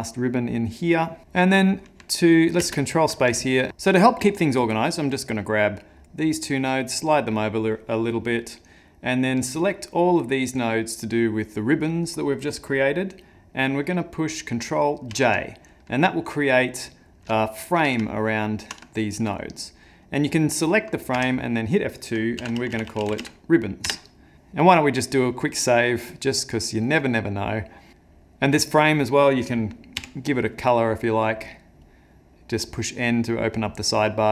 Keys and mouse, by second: 1.4 middle click, 2.6 ctrl+space, 3.5 ctrl+middle click, 4.8 click, 6.0 click, 7.5 click, 9.4 click, 15.0 ctrl+j, 16.5 click, 17.4 shift+middle click, 18.1 ctrl+middle click, 18.9 shift+middle click, 20.0 click, 21.1 F2, 22.8 b, 24.3 click, 25.1 click, 28.7 middle click, 30.0 n, 31.3 click, 31.9 click, 32.6 click, 33.0 click, 33.6 click.